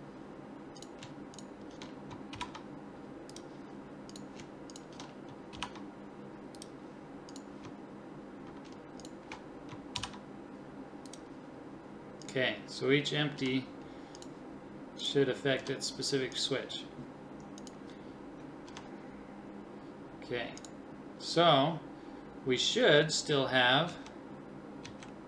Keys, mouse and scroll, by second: 2.3 ctrl+p, 5.5 ctrl+p, 7.3-9.1 drag, 10.0 ctrl+p, 11.0 click, 13.4 g, 15.6 g, 18.7 g, 23.9 Right, 24.9 Right.